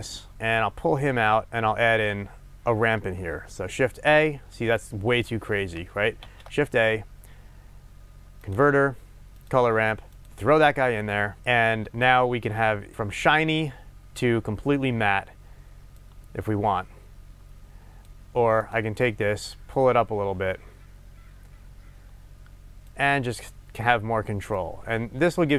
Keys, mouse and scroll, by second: 9.5 shift+a, 10.3 click, 16.0-18.7 drag, 23.3 click, 24.6-25.5 drag.